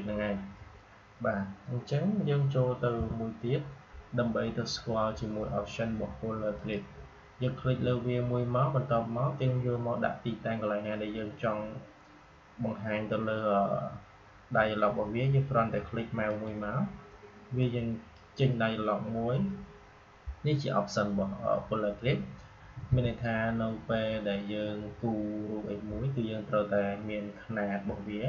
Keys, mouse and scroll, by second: 2.9 Delete, 6.5 click, 16.2-20.5 drag.